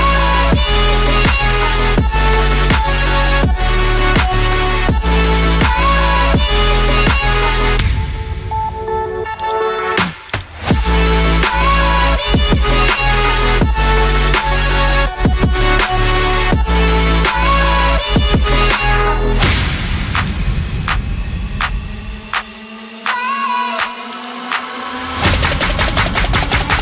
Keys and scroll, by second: 3.3 Return, 7.5 Return.